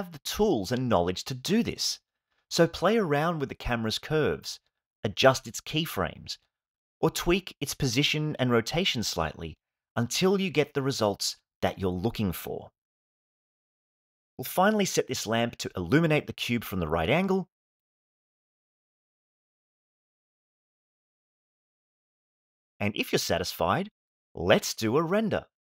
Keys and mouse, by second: 0.9 space, 1.9 space, 3.0 middle click, 3.4 middle click, 3.8 g, 3.8 x, 4.5 g, 4.5 x, 5.0 Right, 5.1 Right, 5.6 g, 5.6 x, 6.0 ctrl+Left, 6.2 click, 6.7 g, 6.7 x, 6.9 Right, 7.0 Right, 7.1 Right, 7.1 Left, 7.2-7.6 Right, 7.9-8.9 drag, 8.9 Home, 9.4 click, 12.9 space, 13.8 click, 17.7 g, 19.8 click, 19.8 KP_0, 20.1 click, 20.8 click, 23.8 space.